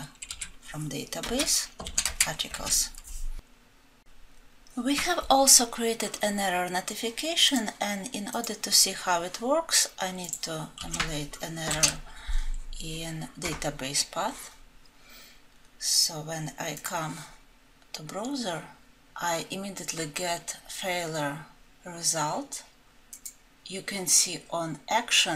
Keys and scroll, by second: 1.3 Return, 2.7 ctrl+alt+l.